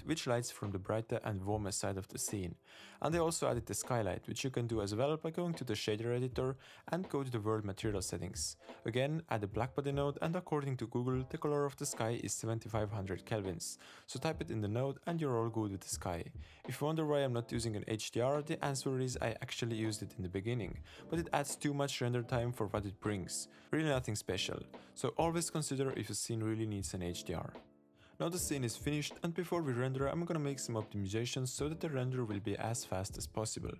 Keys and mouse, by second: 5.6-6.5 drag, 7.3 click, 8.0 shift+a, 11.6-12.3 drag, 13.6 click, 14.2-25.7 drag, 15.2 0, 29.1 click.